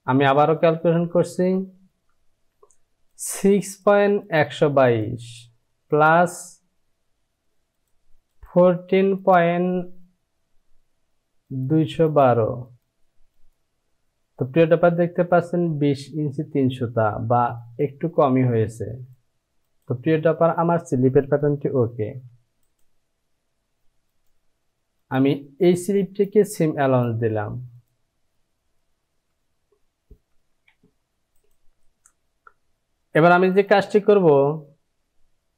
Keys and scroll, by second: 22.1 j, 29.6 Down, 30.7 Down.